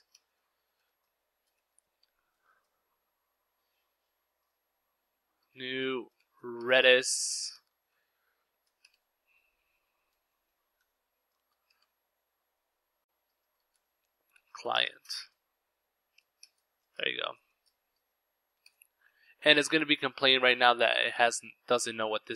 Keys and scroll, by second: 0.0-0.1 typing, 2.1 typing, 3.8-10.0 typing, 14.0-15.6 typing, 16.8-19.2 typing, 17.2 Return, 20.5 ctrl+s.